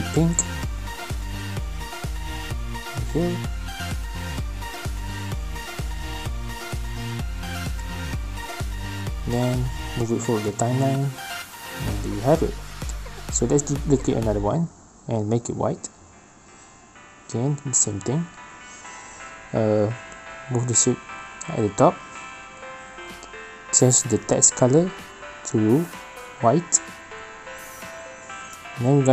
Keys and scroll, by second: 13.3 ctrl+shift+c, 13.5 ctrl+v.